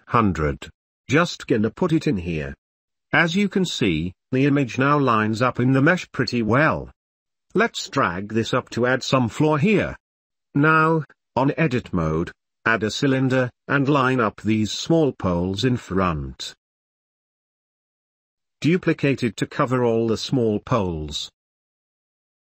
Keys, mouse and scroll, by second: 0.4 KP_0, 0.8-2.1 middle drag, 2.4-3.3 middle drag, 5.3-5.6 middle drag, 5.9 Tab, 6.0 2, 6.2 g, 6.7 ctrl+z, 6.7 2, 7.0 e, 8.0 middle click, 8.5 middle click, 8.9 ctrl+middle click, 8.9 KP_0, 9.1 ctrl+s, 9.3 middle click, 9.6-11.6 drag, 12.4 s, 13.6 click, 13.9-18.7 typing, 14.4 shift+middle click, 16.9 click, 18.1 click, 18.8 shift+click, 19.3 ctrl+z, 19.5 ctrl+s, 19.9 shift+d, 20.4 ctrl+s, 20.4 Tab, 20.6 ctrl+s, 21.0 Tab, 21.1 shift+l, 21.2 shift+d, 21.5 Tab, 21.6 ctrl+s, 22.1 click, 22.3 click, 22.5 Tab, 22.5 3.